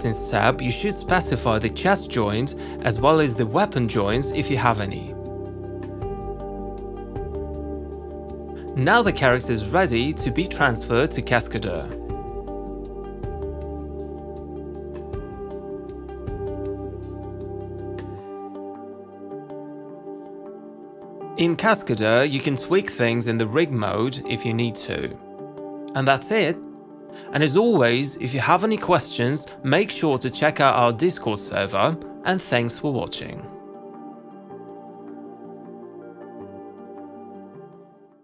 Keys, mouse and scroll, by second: 5.3 click, 6.4 click, 12.4 click, 13.9 click, 14.6 click, 17.6 click, 19.8 click, 20.7 click, 26.6 alt+click, 27.3-28.3 alt+scroll, 29.8 click, 34.0 click, 34.4 w, 36.1 click.